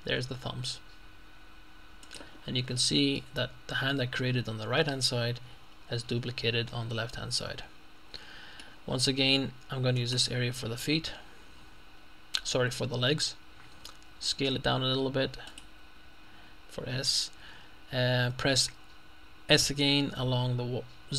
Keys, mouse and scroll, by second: 2.1 click, 2.8 middle click, 3.1 middle click, 7.5-9.0 middle drag, 9.0-10.0 scroll up 2, 10.0 right click, 11.7-12.6 scroll up 2, 13.8 s, 15.5 click, 19.5 s.